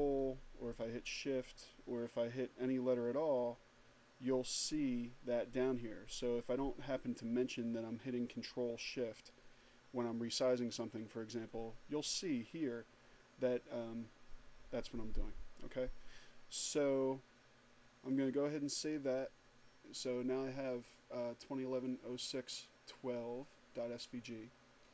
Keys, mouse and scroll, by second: 18.1 click.